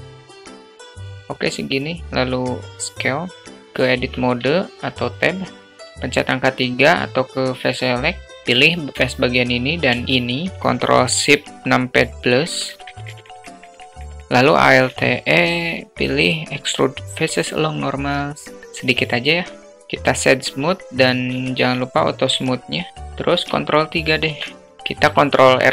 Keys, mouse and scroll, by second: 0.5 s, 3.4 alt+Tab, 3.4 alt+middle click, 6.7 click, 14.2 alt+e, 19.1 alt+click, 19.7 1, 20.1 q, 21.2-22.0 alt+middle drag, 23.3 ctrl+3, 24.6 Tab, 25.4 ctrl+r.